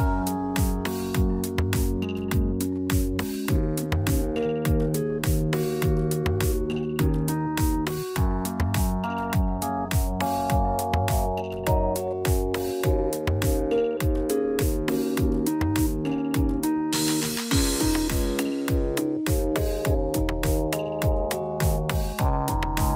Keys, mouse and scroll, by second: 1.1 click, 1.7 scroll down 3, 2.4 middle click, 3.9 shift+middle click, 4.3-4.7 scroll up 8, 4.9 middle click, 7.4 shift+middle click, 7.9 middle click, 8.9 click, 11.6 middle click, 14.1 scroll down 4, 14.4 shift+middle click, 14.8 middle click, 15.2 shift+middle click, 16.5 click, 16.8 Tab, 18.2 click, 18.7 click, 18.9 shift+click, 20.7 shift+d, 21.7 p, 22.5 Tab, 22.7 click.